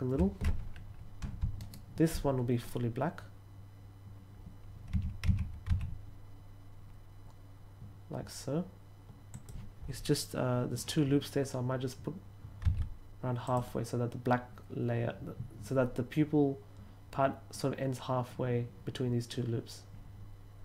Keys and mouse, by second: 4.6-6.1 typing, 9.2 click, 12.5 s, 13.3 click.